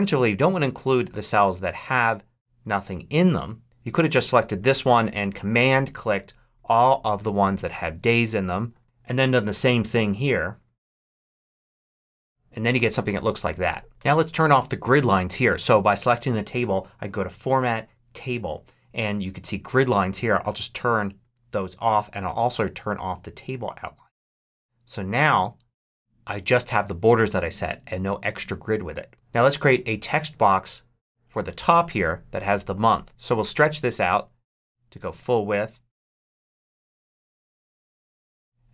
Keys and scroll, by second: 33.1 shift+super+z.